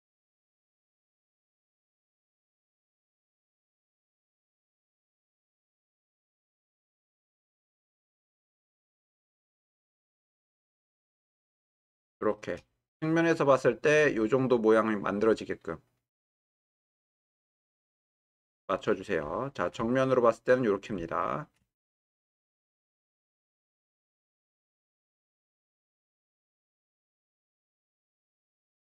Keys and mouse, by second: 2.2 shift+drag, 3.9 g, 4.2 y, 11.7-12.4 shift+middle drag, 17.4-18.4 shift+middle drag, 19.5 shift+middle drag, 19.9 ctrl+middle click, 21.2 shift+middle click, 21.9-23.3 ctrl+middle drag.